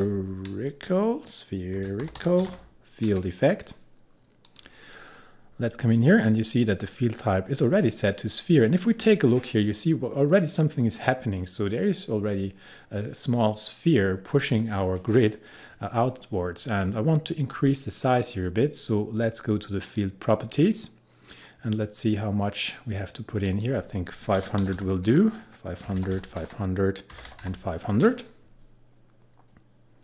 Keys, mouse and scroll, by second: 0.0-0.4 typing, 1.8-3.1 typing, 4.5 click, 5.0-6.9 scroll down 1, 9.2-11.0 scroll up 1, 17.4-18.4 scroll down 1, 19.8 click, 21.1 scroll down 1, 23.5 click, 24.2-27.9 typing.